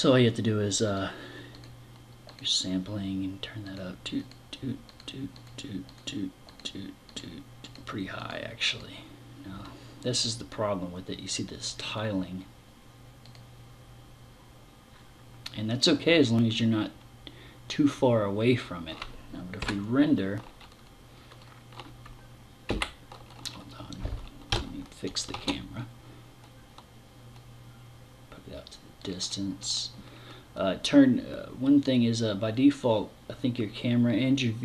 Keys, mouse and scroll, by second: 0.3 click, 1.0 click, 1.7 click, 3.1 click, 3.7 click, 4.3 click, 4.8 click, 5.4 click, 5.9 click, 6.5 click, 7.1 click, 7.7 click, 8.1 click, 11.3 click, 12.9 click, 22.1 Escape, 23.9 KP_0, 24.8 shift+f, 28.6 click.